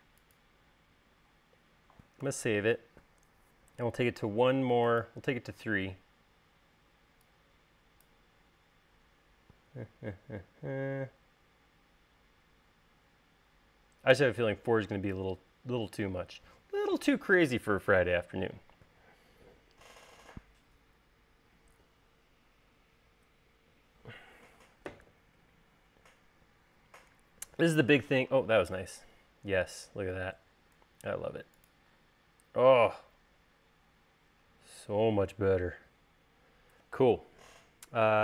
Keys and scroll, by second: 0.3 space, 2.9 super+s.